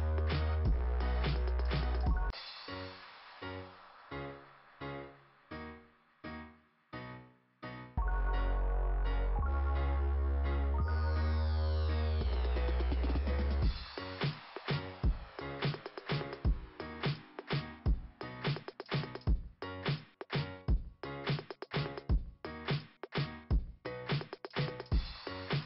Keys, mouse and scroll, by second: 2.7 scroll down 2, 3.3-4.1 scroll down 1, 4.2-4.6 scroll up 3, 4.6 scroll down 3, 4.7 scroll up 2, 4.7 scroll down 2, 7.0 click, 9.2 click, 9.5 click, 13.2 click, 13.6 click, 14.0 click, 14.3 click, 15.1 scroll up 2, 17.6-18.5 scroll up 2, 18.5 click, 20.2 click, 22.1 click, 22.5 click, 22.6 click, 22.7 click, 22.8 double click, 24.1-25.6 typing.